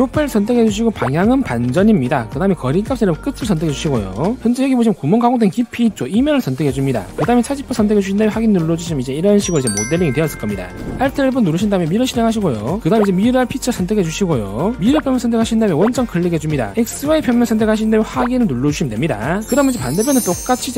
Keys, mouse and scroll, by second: 1.0 click, 2.3 click, 4.2 click, 7.2 click, 9.3 click, 10.1 shift+middle click, 11.9 alt+1, 12.3 click, 14.0 click, 14.4 click, 14.8 click, 15.9 click, 18.1 click, 19.2 click.